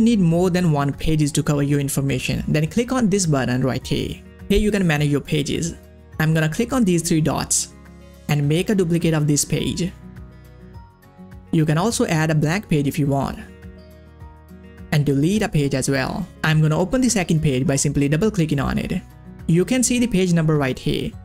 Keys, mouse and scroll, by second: 2.9 click, 3.4 middle click, 6.9 middle click, 6.9 click, 10.0 click, 12.5 click, 14.7 click.